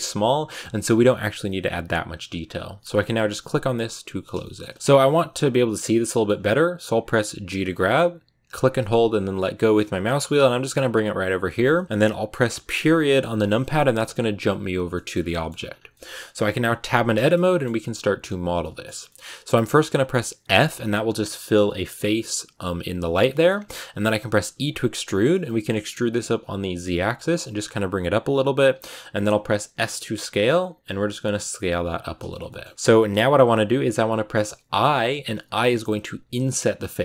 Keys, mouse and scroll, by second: 4.1 shift+middle click, 4.7-5.9 scroll up 5, 5.9 shift+middle click, 6.2-7.5 scroll down 2, 7.6 g, 11.6-12.8 shift+middle drag, 12.8 KP_Decimal, 14.8 middle click, 15.0-15.8 scroll down 5, 15.2 middle click, 15.8 middle click, 16.7 Tab, 17.1-20.3 shift+middle drag, 20.3 f, 22.9 shift+middle click, 23.3 scroll down 2, 24.2 e, 31.9 s, 32.1 shift+middle click, 32.8 s, 34.4 i.